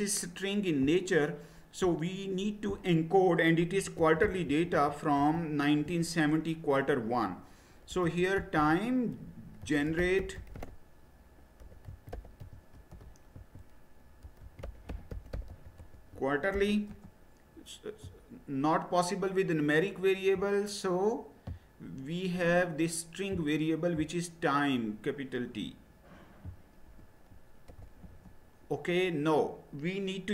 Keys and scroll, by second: 3.6-5.8 typing, 7.6-16.5 typing, 16.9 Return, 26.9 BackSpace, 27.7 shift+t, 28.0 Return.